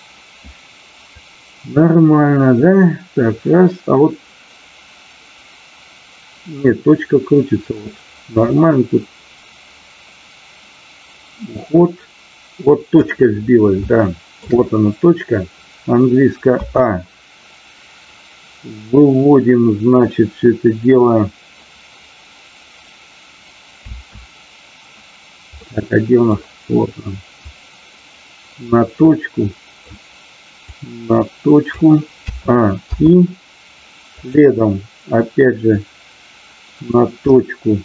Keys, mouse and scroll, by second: 1.1-13.0 drag, 13.8 shift+middle click, 25.6 middle click, 27.3-28.7 drag, 29.0 middle click, 30.7-31.8 drag, 34.2 click, 35.7-36.9 drag, 37.4 middle click.